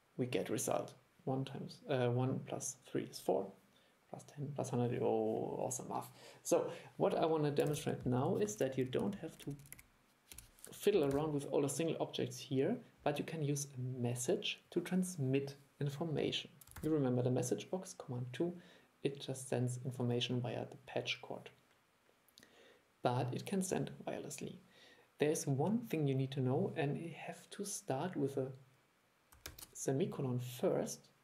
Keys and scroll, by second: 7.8 super+e, 11.2 super+e, 16.9 super+2.